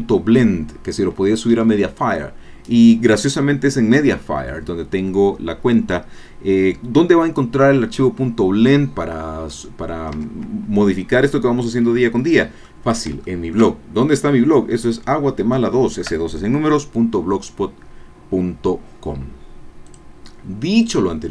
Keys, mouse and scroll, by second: 9.6 click, 10.2 Tab, 10.9-13.1 drag, 13.3 shift+click, 13.8-15.1 shift+drag, 15.1-15.4 scroll up 1, 15.7 shift+click, 19.8 click, 20.8 click.